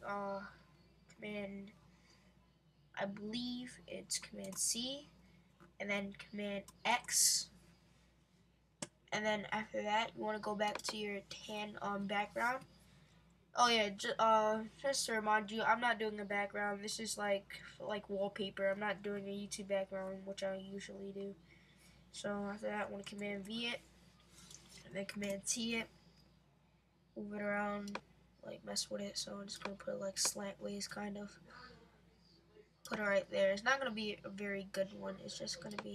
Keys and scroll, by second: 4.5 super+c, 6.7 super+x, 23.0 super+v, 25.2 super+t.